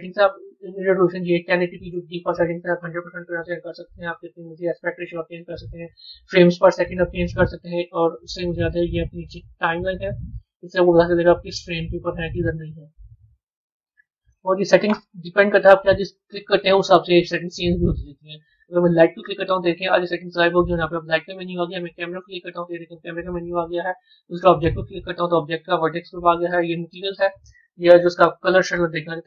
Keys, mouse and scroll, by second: 9.6-11.9 drag, 13.2-15.4 drag, 15.4 scroll down 1, 18.8 click, 20.6 click, 22.0 click, 24.4 click, 26.4 click.